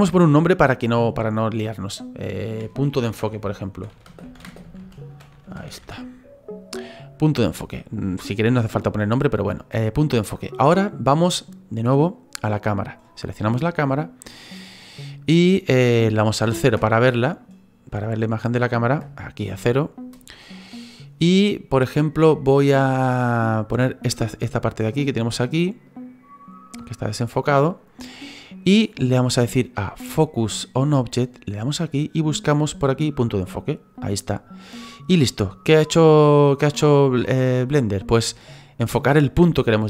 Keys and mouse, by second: 4.0 space, 4.4 e, 7.5 click, 12.7 click, 16.6 KP_0, 18.9 KP_0, 23.0 click, 23.8 click, 24.8 click, 25.8 click, 26.7 click, 31.6 click, 33.9 click.